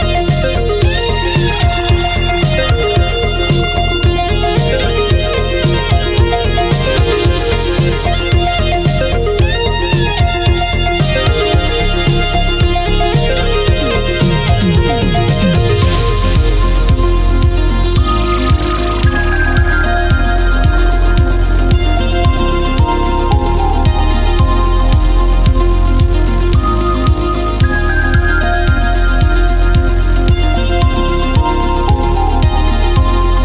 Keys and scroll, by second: 11.5 ctrl+z, 18.4 ctrl+z, 23.9 ctrl+z, 26.3 space.